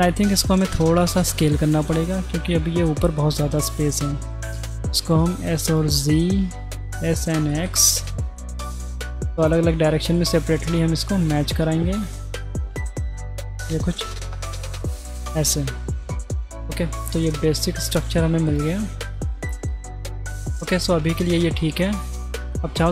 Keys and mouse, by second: 0.7 middle click, 4.0 middle click, 4.4 s, 6.4 s, 7.8 middle click, 8.4 middle click, 9.8 middle click, 11.2 s, 12.6 s, 14.4 s, 15.9 g, 16.4 middle click, 17.1 middle click, 18.5-19.1 middle drag, 20.4 middle click, 21.2 middle click, 22.0-22.6 middle drag.